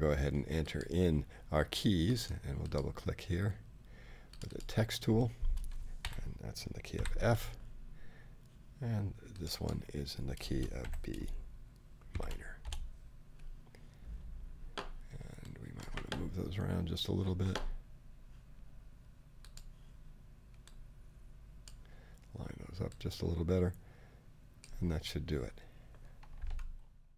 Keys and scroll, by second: 6.0 shift+f, 6.9 shift+;, 10.8 shift+b, 12.1 shift+;, 12.6 shift+Return, 13.3 Return.